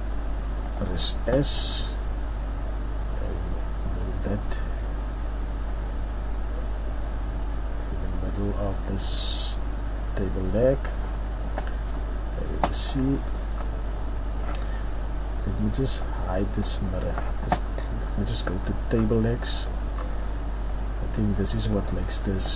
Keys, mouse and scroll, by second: 1.5 click, 2.0 g, 12.1 middle click, 12.1-12.8 scroll down 2, 13.1-13.6 scroll down 1, 13.6-14.1 scroll down 1, 14.1-14.6 scroll up 1, 18.1-19.1 scroll up 2, 19.1 middle click, 19.6-20.0 scroll up 1, 20.0 middle click, 20.5-21.0 scroll up 1, 21.0-21.3 scroll up 1, 21.5 middle click.